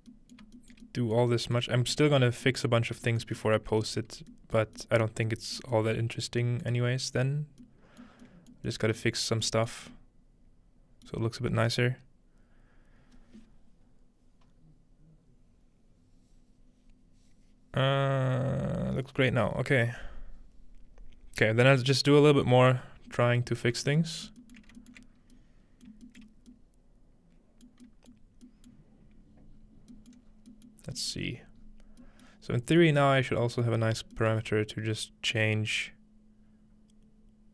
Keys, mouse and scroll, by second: 0.4-0.9 shift+middle drag, 1.2 shift+middle click, 1.7 shift+middle click, 1.7-3.9 scroll up 1, 2.3 middle click, 2.7-3.1 shift+middle drag, 3.3 shift+middle click, 3.7 shift+middle drag, 4.0-6.4 shift+middle drag, 4.1-4.8 scroll down 2, 6.2-7.1 scroll down 1, 7.1 scroll up 1, 8.6 middle click, 8.6-9.0 scroll up 1, 9.2 middle click, 9.2-11.0 scroll down 1, 11.1-11.5 middle drag, 13.0-16.6 middle drag, 24.6-25.4 alt+shift+middle drag, 25.2-26.3 scroll up 1, 25.9 alt+shift+middle click, 26.2 alt+shift+middle click, 26.3-27.6 scroll down 1, 27.6-28.1 scroll down 1, 27.7 middle click, 28.2 middle click, 28.7-29.8 middle drag, 28.9-29.5 scroll up 1, 29.5-30.8 scroll down 6, 30.8-31.7 scroll up 5, 31.1 middle click, 31.4-32.0 middle drag, 32.3-32.7 middle drag, 32.3-32.7 scroll down 2, 33.0 middle click, 33.1 scroll up 1, 33.7 middle click, 33.9 scroll up 1, 34.4-37.5 middle drag, 34.5 scroll up 1, 35.3-37.5 drag.